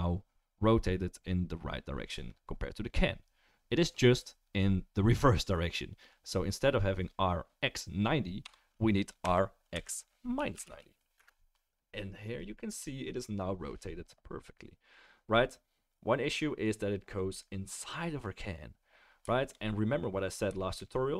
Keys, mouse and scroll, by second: 9.2 r, 12.3-21.1 middle drag.